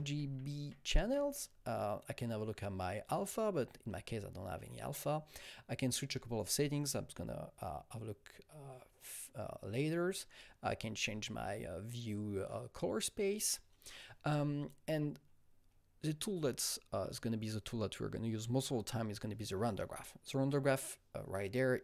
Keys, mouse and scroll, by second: 0.0-1.0 typing, 15.1 click, 15.1-15.5 scroll up 1, 15.5-16.1 scroll down 1, 16.1-17.2 scroll down 2.